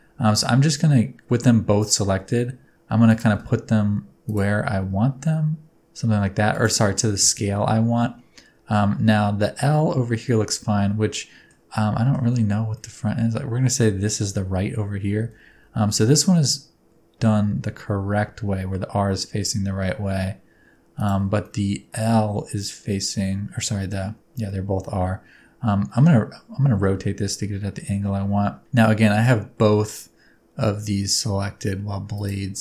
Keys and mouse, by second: 1.8 click, 2.1 s, 3.1 click, 3.3 g, 4.3 shift+click, 4.5 s, 8.0 middle click, 11.2 middle click, 11.8 middle click, 12.8-13.8 middle drag, 15.2 g, 15.7 x, 21.4-23.6 middle drag, 24.5-25.9 middle drag, 26.9 r, 32.2 click.